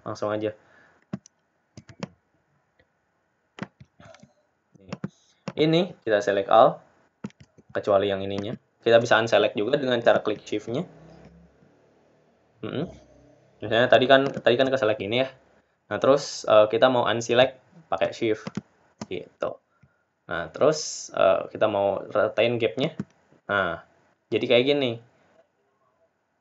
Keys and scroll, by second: 4.9 ctrl+d.